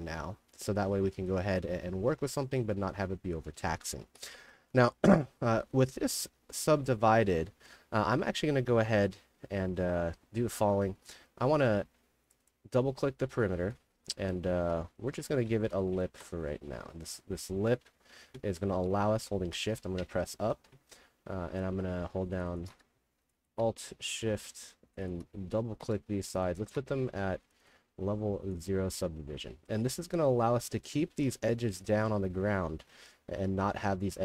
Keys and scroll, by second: 0.1 d, 0.9 a, 3.7-6.1 typing, 8.3 a, 8.8 d, 10.4 d, 10.8 d, 11.9 2, 13.0 a, 14.2 d, 14.8 d, 15.7 ], 18.2-19.1 typing, 19.6 shift+Up, 21.1 w, 21.7 3, 24.2 w, 25.6 w, 29.7 w, 31.9-33.5 typing.